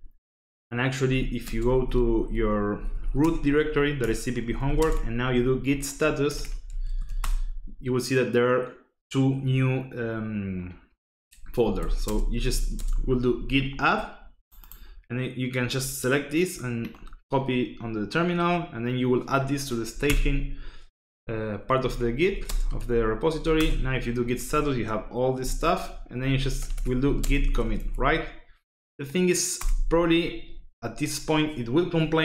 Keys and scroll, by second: 0.8-7.2 typing, 3.2 Return, 11.3-12.9 typing, 20.0 Return, 21.5-23.9 typing, 26.1-28.1 typing, 29.5 Return.